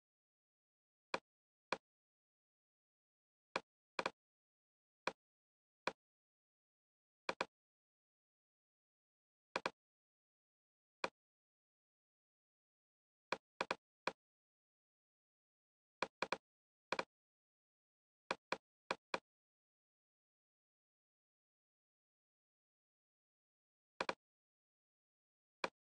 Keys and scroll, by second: 21.3 shift+f, 22.3 Return.